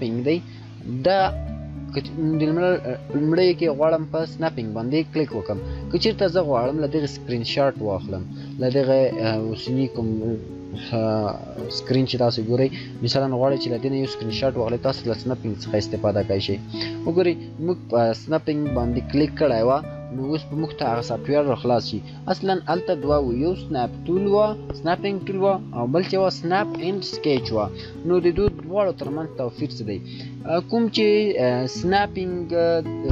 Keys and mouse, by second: 4.2 click.